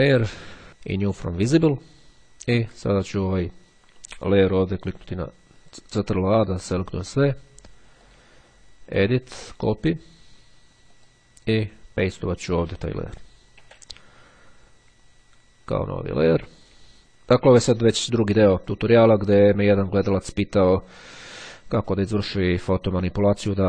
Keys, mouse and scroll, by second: 0.0 click, 1.1 click, 2.7 click, 5.6 ctrl+a, 8.1 click, 10.9 click, 12.1 click, 13.5 ctrl+v, 16.0 click.